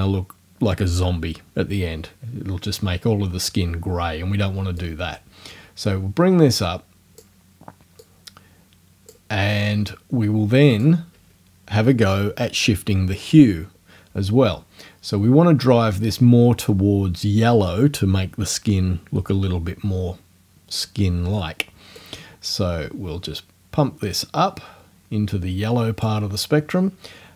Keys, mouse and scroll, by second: 4.8-7.4 drag, 8.0 click, 10.7 click, 22.0-26.2 drag.